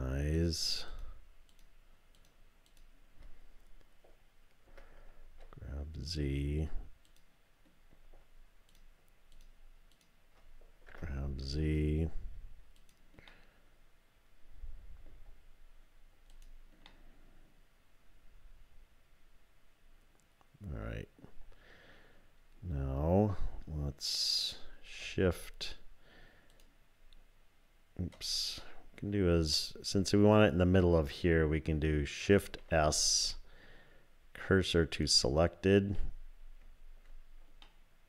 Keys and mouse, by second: 0.4 shift+click, 4.7 g, 8.7 click, 9.3 shift+click, 9.9 shift+click, 10.9 g, 13.3-15.1 drag, 16.3 click, 17.0-20.4 drag, 20.4 middle click, 32.3 shift+s, 33.3 shift+s, 35.9 typing, 37.6-38.0 middle drag.